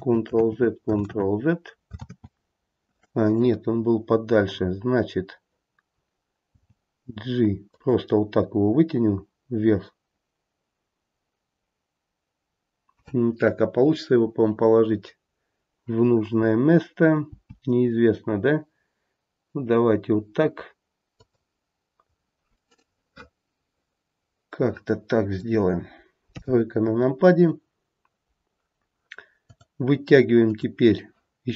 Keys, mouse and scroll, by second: 0.4 ctrl+z, 1.1 ctrl+z, 2.0 ctrl+z, 6.5 g, 17.2 g, 22.2-22.7 scroll up 1, 22.7 middle click, 25.2 middle click, 26.2 KP_3, 26.9-29.3 scroll down 1, 29.3-29.9 scroll down 1, 30.4 click.